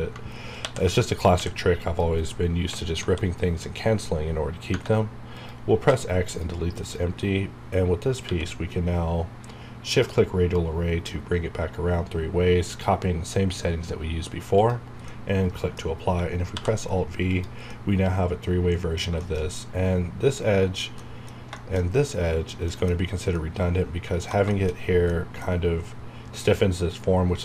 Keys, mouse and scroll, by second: 0.6 ctrl+i, 1.3 x, 1.8 click, 2.9 KP_7, 4.7 Tab, 5.3 click, 5.8 x, 6.2 click, 8.2 q, 9.8 click, 14.5 click, 15.1-16.5 middle drag, 16.5 alt+v, 17.2 click, 17.7-19.2 middle drag, 19.5 scroll up 1, 20.7 scroll down 1, 21.0 middle click, 21.8 shift+scroll up 2, 22.4 scroll down 1, 22.7 middle click, 22.9 scroll up 1, 23.4 middle click, 24.7 shift+scroll up 2, 25.1-27.0 middle drag, 27.0 scroll down 1.